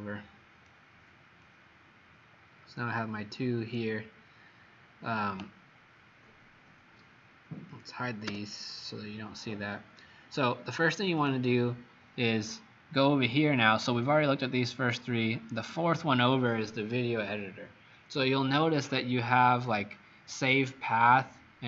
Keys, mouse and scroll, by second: 8.3 h.